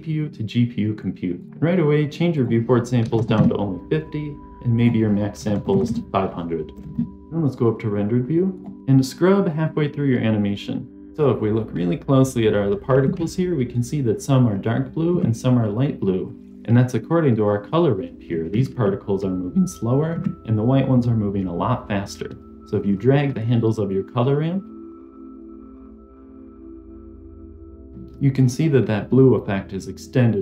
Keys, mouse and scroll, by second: 2.3-3.4 drag, 4.7-6.8 drag, 5.6 KP_0, 5.8 KP_0, 8.5 click, 24.8-27.9 drag.